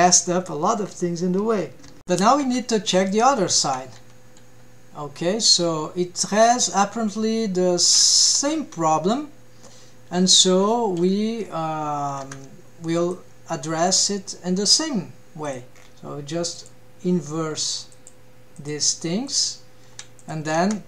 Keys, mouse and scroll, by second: 2.0 shift+middle click, 2.5 alt+a, 2.9 click, 3.4-3.7 shift+middle drag, 4.0 g, 12.3 ctrl+Tab, 13.0 click, 13.9 click, 15.4 click, 15.8-16.6 scroll down 1, 16.6-18.1 drag, 16.6 scroll down 1, 18.5-19.4 drag, 20.2 click, 20.7 ctrl+Tab.